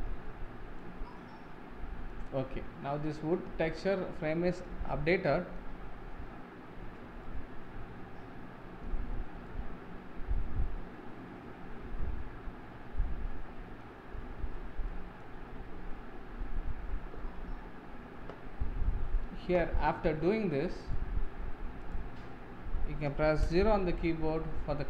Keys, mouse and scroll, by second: 0.2-2.4 shift+middle drag, 2.4-3.0 scroll down 4, 3.0-4.6 middle drag, 4.9 scroll up 2, 5.3 shift+middle drag, 6.0-7.2 scroll down 3, 7.2-12.4 middle drag, 14.1-14.8 scroll down 12, 14.9-15.3 middle drag, 15.3-16.5 scroll up 13, 20.3-20.6 scroll down 2, 20.6-21.4 middle drag, 21.4-21.9 scroll up 1, 21.9 click, 22.5-23.4 scroll down 2, 23.4 KP_0.